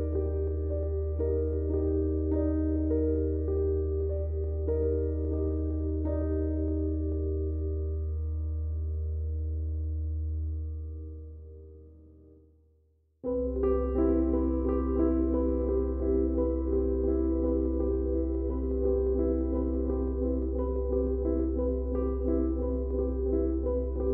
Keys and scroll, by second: 15.7-16.5 typing, 19.3 Tab.